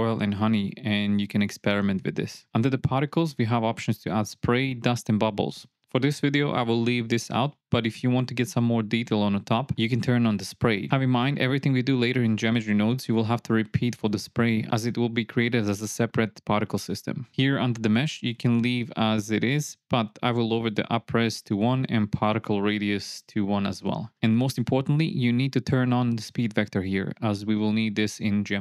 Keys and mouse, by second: 3.2 click, 6.2 click, 17.9 click, 21.0-22.9 drag, 23.4-25.1 drag.